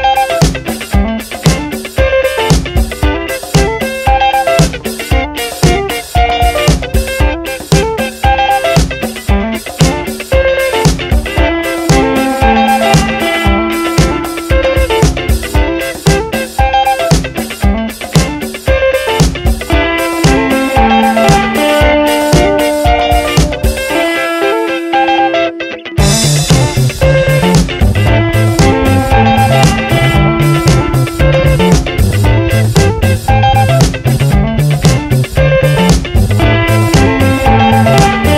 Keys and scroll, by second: 0.2 v, 0.3 Right, 3.9 ctrl+t, 7.1 Return, 16.5 Return, 24.9 g, 25.2 a, 26.3 b, 27.1 Return, 29.3 v, 29.5 Down, 30.5 Up, 34.1 Return, 34.4 Down, 35.1 ctrl+t, 37.1 Left, 37.8 Right.